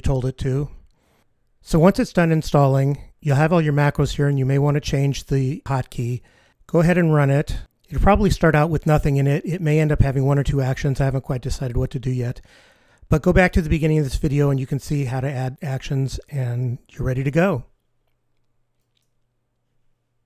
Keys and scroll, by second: 6.8 F15.